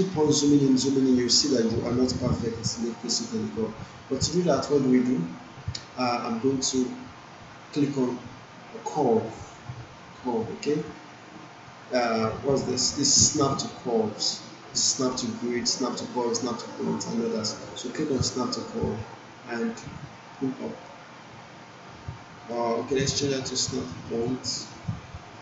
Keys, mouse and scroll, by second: 18.1-22.7 drag.